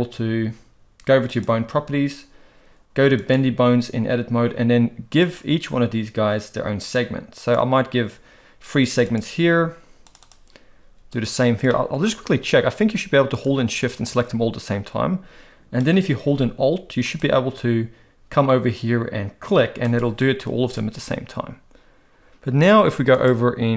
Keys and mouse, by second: 1.3 click, 3.2 click, 5.2 click, 7.0 click, 9.2-10.2 drag, 10.2 click, 11.1 click, 11.7 shift+middle click, 17.1 alt+click, 19.8 alt+click, 23.1-23.7 drag.